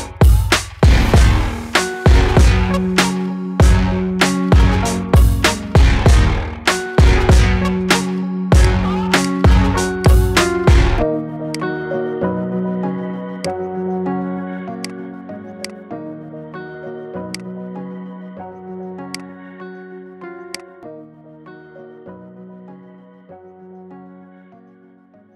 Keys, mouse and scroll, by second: 0.8 click, 6.9-7.3 scroll down 4, 7.3-8.4 middle drag, 8.4 click, 9.0-10.4 drag, 10.4 scroll down 6, 11.3-12.3 drag, 12.3-12.6 scroll down 6, 13.2 click, 14.6 click, 15.4-16.1 drag, 16.1-17.1 scroll down 10, 17.1-18.0 drag, 19.0 click, 20.4-23.4 drag.